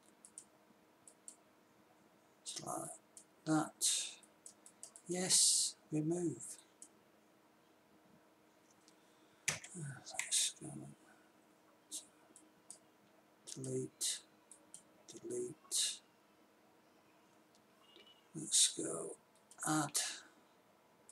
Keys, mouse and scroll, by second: 9.9 Tab, 10.7 Tab, 16.8 middle click, 19.7 click.